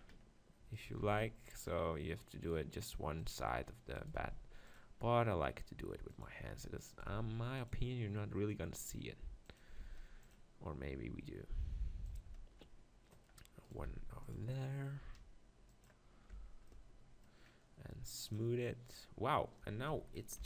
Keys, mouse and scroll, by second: 0.0-1.6 drag, 0.8-2.7 right drag, 1.0 ctrl+r, 3.3-6.0 right drag, 4.0-5.2 drag, 4.2 ctrl+r, 6.2-8.1 drag, 6.9-9.0 right drag, 7.1 ctrl+r, 9.6-11.4 drag, 9.8 ctrl+r, 12.2-14.1 drag, 13.6 right click, 13.9 ctrl+r, 14.4 click, 15.3 right click, 15.8-17.7 drag, 16.3 Tab, 18.2-20.1 drag, 19.8 Tab.